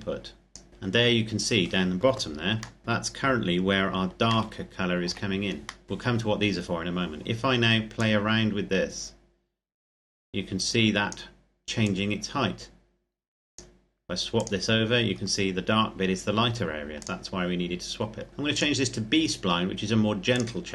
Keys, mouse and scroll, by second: 0.7-1.4 scroll down 1, 2.6 shift+middle click, 2.8-4.0 scroll up 1, 4.2 shift+middle click, 5.6 middle click, 5.8-7.2 scroll up 1, 7.7 click, 14.9-16.8 scroll down 1, 16.8 click, 17.7-18.3 scroll up 1, 18.3 click.